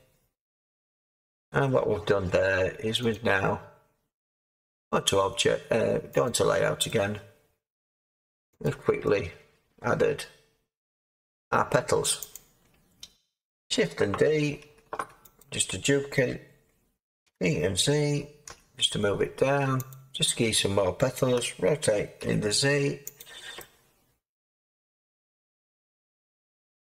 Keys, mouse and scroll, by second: 0.9 Tab, 14.7 Tab, 14.7 d, 17.2 g, 18.4 z, 21.3 r, 22.2 z.